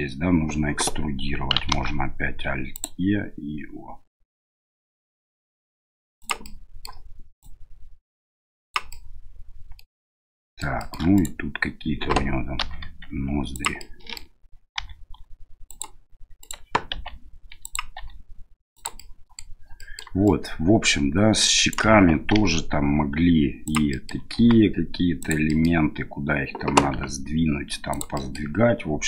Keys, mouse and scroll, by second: 1.7 alt+e, 6.5 middle click, 7.5-8.8 drag, 9.0 middle click, 10.2 middle click, 10.8 shift+middle click, 11.1 right click, 12.6 i, 13.8 middle click, 14.8 e, 16.4 right click, 16.9 i, 18.0 e, 19.0 middle click, 19.8 middle click, 20.2-21.7 right drag, 22.4 e, 23.9 middle click, 24.4 s, 25.5 middle click, 26.9 g, 28.2 middle click.